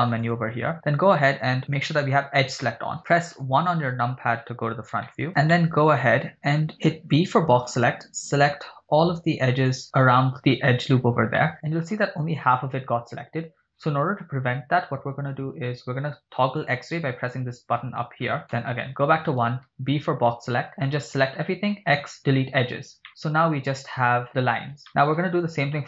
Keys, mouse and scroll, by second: 1.7 click, 3.4 KP_1, 5.2 shift+middle click, 5.3 scroll up 6, 5.5 shift+middle click, 5.9 shift+click, 6.4 scroll up 2, 6.9 b, 11.5 middle click, 16.6 click, 18.5 KP_1, 19.7 b, 21.8 x, 22.9 scroll down 3, 23.1-24.3 middle drag, 24.5 scroll up 3, 24.9 shift+middle click.